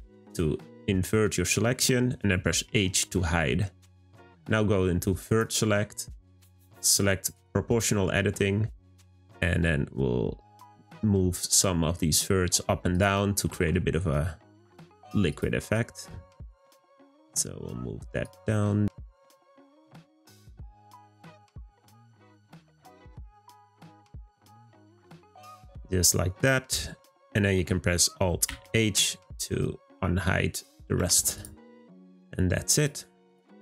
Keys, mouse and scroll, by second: 1.2-2.7 middle drag, 2.7 h, 3.6-5.3 middle drag, 5.3-7.5 drag, 12.0 click, 12.9 click, 13.4 g, 16.4 click, 16.7 g, 18.9 click, 19.5 g, 21.1 click, 21.4 g, 23.2 click, 23.6 g, 26.0-28.4 scroll down 1, 28.4 alt+h, 30.0-30.6 middle drag, 30.6 click, 31.3 click, 31.8 middle click, 32.1-32.7 scroll down 1, 32.7 click, 33.2 click.